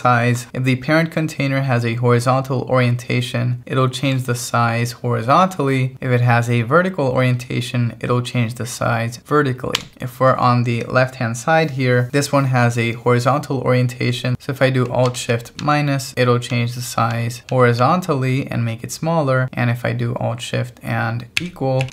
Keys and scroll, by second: 9.8 Escape, 15.6 alt+shift+-, 21.4 alt+shift+=.